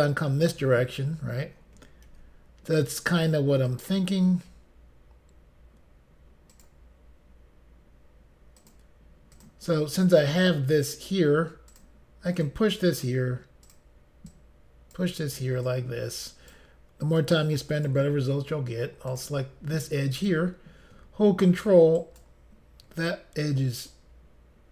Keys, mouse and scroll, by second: 2.1 ctrl+r, 3.7 click, 6.6 click, 8.6 click, 9.4 click, 11.7 click, 12.5 click, 13.7 click, 13.8 click, 14.3 click, 15.7 click, 17.2 click, 19.1 click, 20.2 click, 22.0 ctrl+right click, 24.0 click.